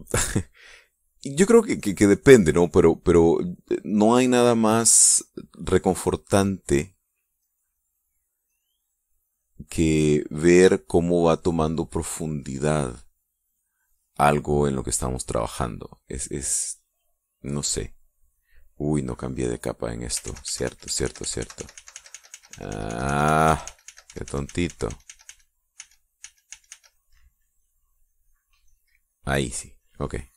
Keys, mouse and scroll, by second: 0.7-1.9 drag, 2.0 click, 2.9 click, 3.6-4.7 drag, 4.7 click, 6.1 click, 7.5-8.7 drag, 9.2-10.3 drag, 10.7 click, 12.1-13.8 drag, 15.5 click, 19.5 click, 20.9 ctrl+z.